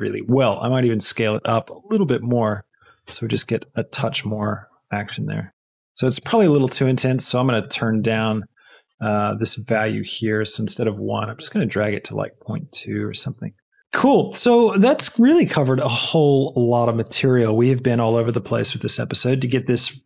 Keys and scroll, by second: 5.1 space, 12.1 space.